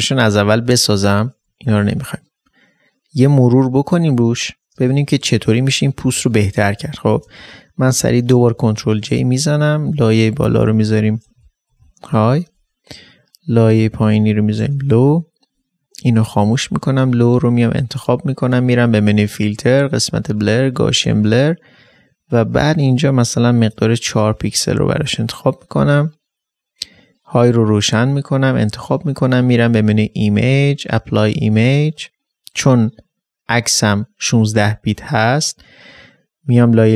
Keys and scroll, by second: 10.9-12.3 typing, 14.1 shift+Return, 14.5-15.0 typing.